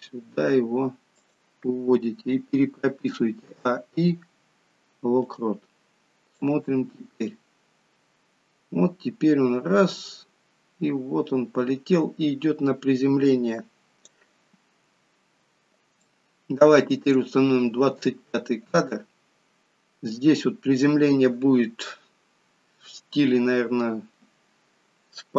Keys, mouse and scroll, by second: 2.9 a, 3.5 a, 6.4 click, 15.6-16.1 scroll up 2, 16.1 shift+middle click.